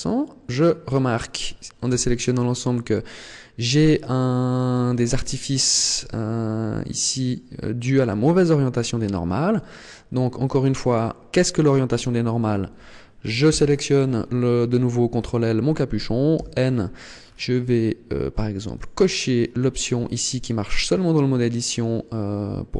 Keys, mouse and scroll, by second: 1.7 a, 2.7 middle click, 4.5 Tab, 5.9 middle click, 7.9 Tab, 8.3 middle click, 9.5-9.9 scroll up 2, 10.7 right click, 13.3 ctrl+l, 16.2 n, 17.0-17.7 scroll down 6, 18.5 click, 19.4-19.8 scroll up 4.